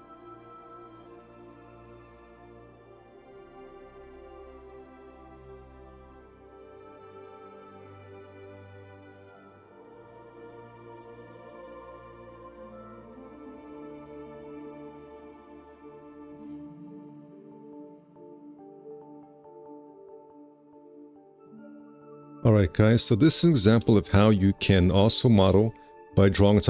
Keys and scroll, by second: 0.2 F4, 1.4 space, 1.8 4, 1.8 q, 10.3 shift+e, 10.5 space, 11.1 F4, 11.6 4, 13.4 space, 13.6 4, 17.7 space, 18.2 4, 22.8 F4, 25.4 alt+q, 25.8 F4.